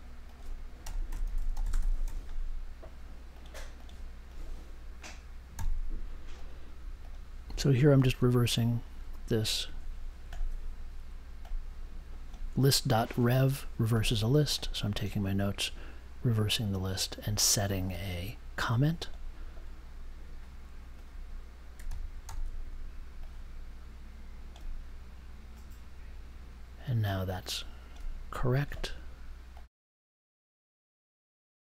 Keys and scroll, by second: 0.5-2.2 typing, 5.5 c, 21.8 super+x, 22.2 super+v.